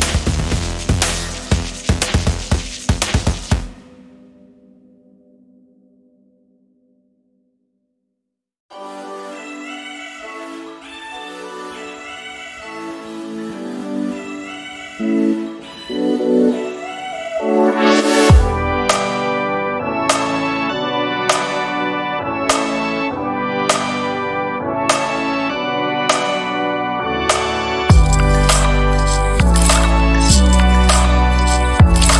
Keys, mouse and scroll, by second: 0.9 shift+click, 5.2-5.8 scroll down 2, 6.3 ctrl+click, 7.8 click, 8.4-9.0 ctrl+scroll up 2, 10.8 click, 11.2 click, 12.8 ctrl+f, 14.0 ctrl+d, 14.5-15.6 ctrl+drag, 15.6 space, 16.7-17.8 ctrl+drag, 18.6 click, 20.0 space, 20.5-22.0 drag, 22.7 KP_5, 23.7-24.0 ctrl+scroll up 2, 24.6 ctrl+shift+click, 26.3 click, 27.9 click, 28.7 click.